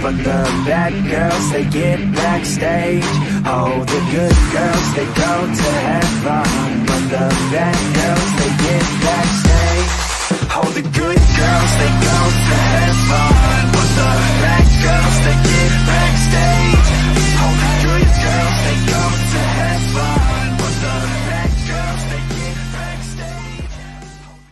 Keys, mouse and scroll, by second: 1.0-3.7 drag, 4.6-5.8 middle drag, 7.1 click, 8.4 middle click, 10.1 ctrl+z, 11.6 click, 13.0 click, 14.4-15.5 drag, 15.8 click, 17.1-20.4 middle drag.